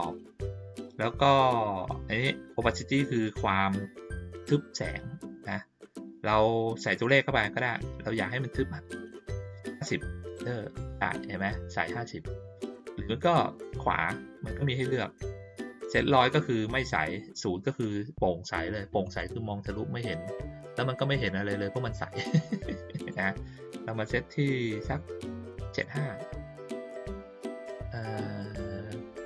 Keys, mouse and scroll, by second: 7.0 click, 13.6 right click, 19.0 click, 22.9 right click, 25.6 click.